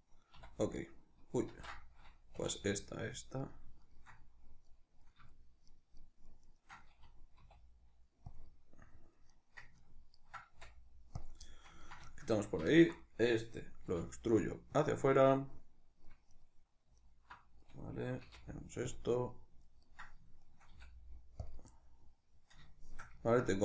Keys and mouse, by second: 0.6 right click, 1.2 ctrl+z, 2.1 3, 2.3 right click, 2.6 shift+right click, 2.9 shift+right click, 3.1 shift+right click, 3.6 shift+right click, 3.9 middle click, 4.8 right click, 5.1 shift+right click, 5.5 shift+right click, 5.7 shift+right click, 6.0 shift+right click, 6.2 shift+right click, 6.5-8.1 middle drag, 7.1 e, 8.1 click, 8.2 middle click, 9.1 right click, 9.5 ctrl+right click, 9.9 ctrl+right click, 10.3 x, 11.2-12.4 middle drag, 12.4 alt+right click, 12.9-14.6 middle drag, 13.6 e, 14.6 click, 14.7-16.1 middle drag, 16.1 right click, 16.7 alt+right click, 18.0 x, 19.1 middle click, 19.6 right click, 20.2 shift+right click, 20.5 x, 21.5-23.6 middle drag.